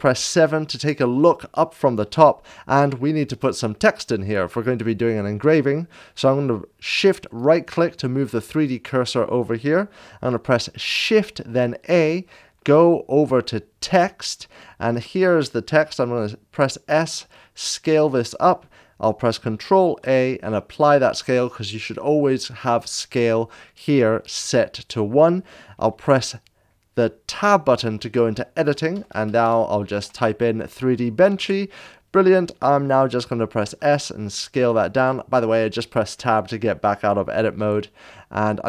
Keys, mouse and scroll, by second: 0.1 Return, 0.3 KP_7, 2.2 shift+middle drag, 6.7 shift+click, 7.3 shift+right click, 11.3 shift+click, 11.5 Return, 11.5 KP_7, 11.5 shift+a, 14.2-18.0 drag, 16.1 s, 18.2 shift+a, 20.2 ctrl+shift+a, 20.8 click, 27.2 s, 28.9 ctrl+a, 28.9 BackSpace, 29.8 Tab, 29.8 ctrl+v, 31.3 Tab, 31.3 BackSpace, 33.6 Tab, 33.6 ctrl+v, 33.6 BackSpace, 33.6 s, 34.8 click, 37.4 click, 37.6 ctrl+v, 37.6 Tab, 37.6 s, 37.6 g.